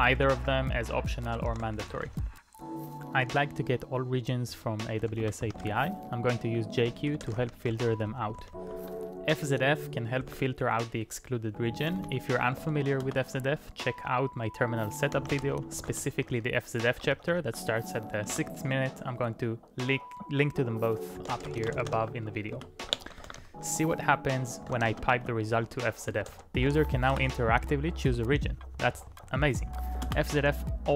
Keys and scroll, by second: 0.0-2.8 typing, 4.3-9.1 typing, 10.3 ctrl+a, 10.4 typing, 11.4-12.6 typing, 13.1 Return, 14.9-15.9 typing, 16.0 Return, 17.1 ctrl+p, 17.3 ctrl+p, 18.3 Return, 20.9-26.8 typing, 22.5 Return, 27.1 Return, 28.4 Page_Up, 28.6 Page_Up, 28.8 Page_Up, 28.9 Page_Up, 29.1 Page_Up, 30.1 Return.